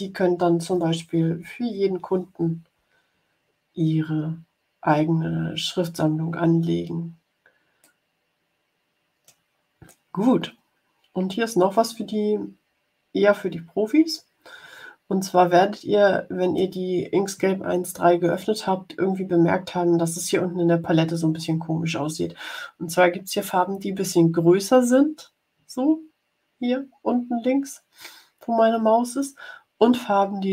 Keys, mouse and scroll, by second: 7.7-9.3 drag, 9.8-16.7 drag.